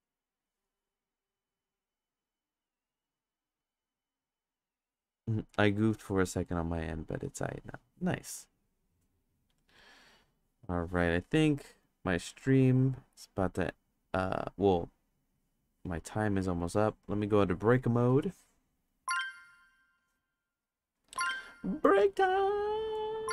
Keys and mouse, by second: 0.0 click, 11.8 click, 12.2 click, 14.2-15.3 drag, 16.6 click.